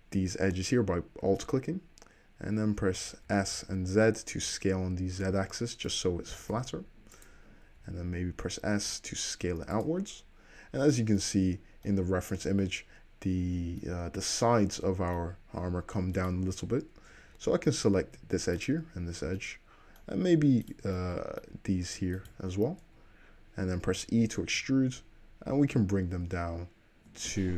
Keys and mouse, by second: 0.3 `, 3.4 s, 6.5 s, 7.9 s, 10.8-16.3 middle drag, 16.3 click, 16.4-18.7 middle drag, 18.7 shift+click, 18.8-20.8 shift+middle drag, 20.8 shift+click, 20.9-22.4 middle drag, 22.4 shift+click, 22.5-25.0 shift+middle drag, 22.9 `, 24.3 e, 26.3 middle click.